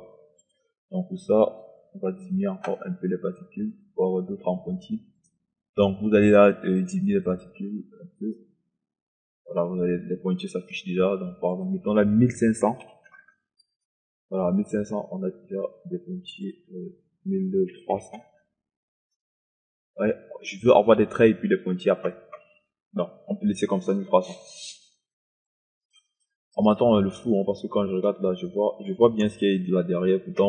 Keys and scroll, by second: 12.8 KP_1, 12.8 1, 13.1 KP_5, 13.6 KP_0, 17.9 KP_1, 18.2 KP_3, 18.5 0.